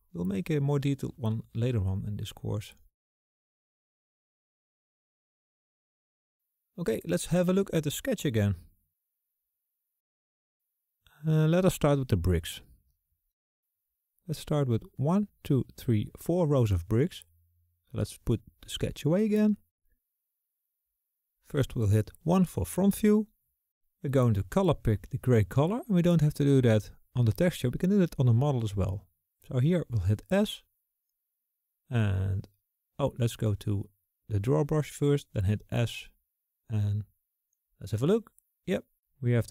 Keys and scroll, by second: 22.0 KP_1, 29.4 s, 35.6 s.